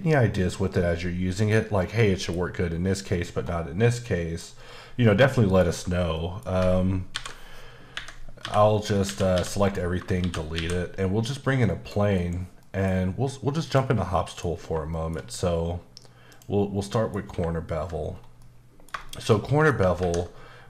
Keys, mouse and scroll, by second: 1.4 click, 1.8 middle click, 2.3 scroll up 1, 4.0 middle click, 5.3 middle click, 6.1 middle click, 7.1 ctrl+n, 7.9 Escape, 8.4-10.7 typing, 9.6 click, 11.6 click, 12.2 KP_Decimal, 13.6 click, 14.1 middle click, 14.5 scroll up 2, 14.9 shift+middle click, 15.2-16.3 scroll down 1, 16.3 click, 16.8 middle click, 18.1-18.4 scroll down 1, 18.4 middle click, 19.0 shift+middle click.